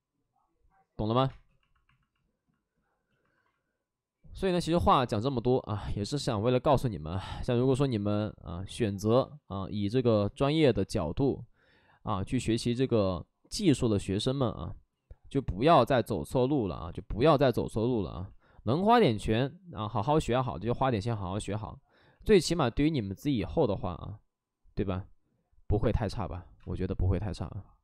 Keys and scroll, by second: 1.2 space, 22.7 alt+s, 22.9 alt+s, 26.5 space, 27.0 space.